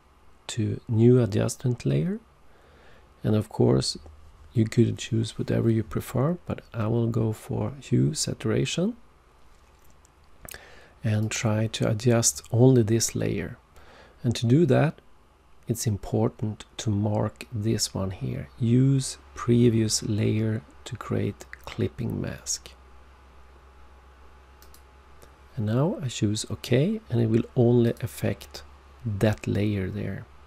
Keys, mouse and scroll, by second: 11.2 click, 24.6 click, 27.8 click.